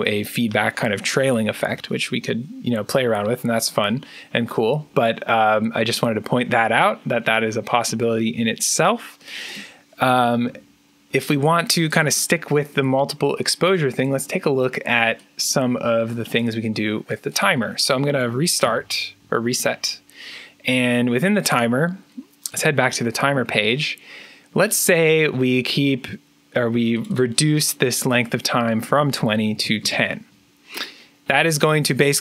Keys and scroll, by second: 1.5 3, 9.9 Delete, 18.5 1, 29.1-30.0 typing.